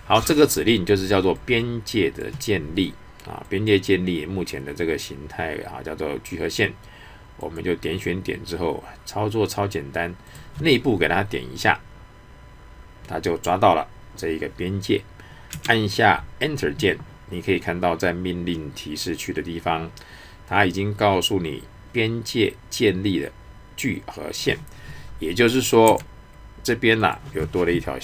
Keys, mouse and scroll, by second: 1.3-3.5 drag, 7.4 click, 10.3 click, 27.0 click.